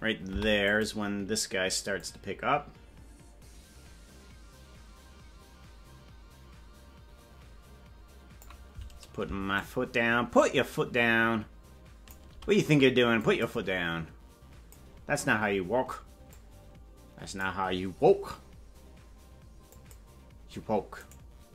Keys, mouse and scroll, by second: 0.2 i, 2.0-8.5 drag, 9.5-12.1 shift+drag, 13.2 click, 13.7-14.8 drag, 16.2-17.4 drag, 19.7 click, 21.0 right click.